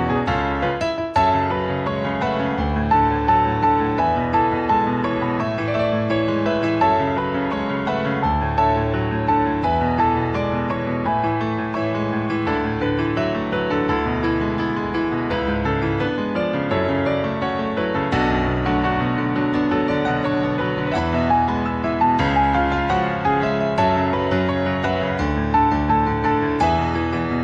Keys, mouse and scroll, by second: 0.8 r, 2.6 s, 3.6 g, 6.1 click, 6.9 Tab, 8.2 click, 9.8-10.5 scroll down 1, 10.6 middle click, 11.4 middle click, 12.4 alt+middle click, 13.2 click, 13.7 click, 14.2 shift+middle click, 17.0 scroll down 1, 17.7-18.1 scroll down 3, 18.3 shift+middle click, 19.1-19.7 scroll down 2, 23.3 click, 24.9 shift+middle click.